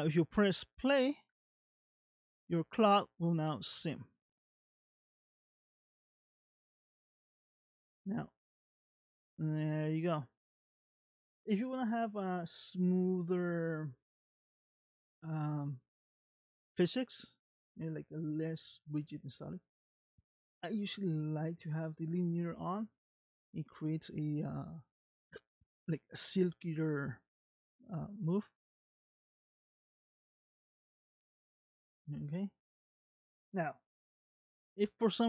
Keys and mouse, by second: 1.6 middle click, 3.8 space, 10.3 space, 19.7-22.6 drag, 24.9 click, 27.4 space, 31.4 space, 31.7-33.4 middle drag.